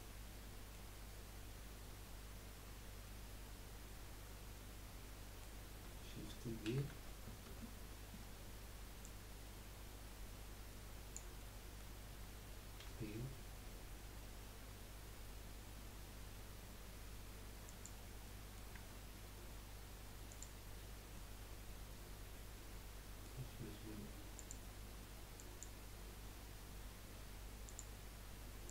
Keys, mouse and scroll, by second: 6.6 shift+d, 9.0 click, 11.4-12.8 middle drag, 12.8 p, 18.2 middle click, 18.7 Tab, 20.2 click, 21.1-24.3 middle drag, 24.3-27.5 drag.